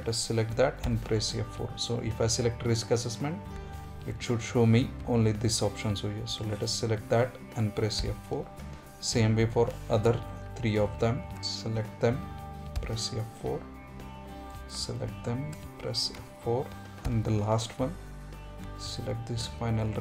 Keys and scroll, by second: 6.2 F4, 11.7 F4.